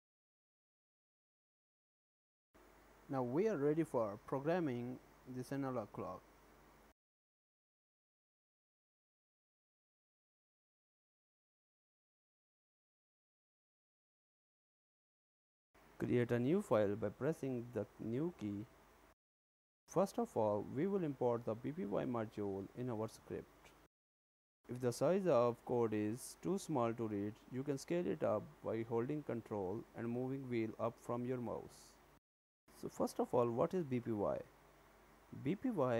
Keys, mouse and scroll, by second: 0.3 click, 0.6 click, 0.7 scroll up 1, 0.9 ctrl+s, 1.1 shift+middle click.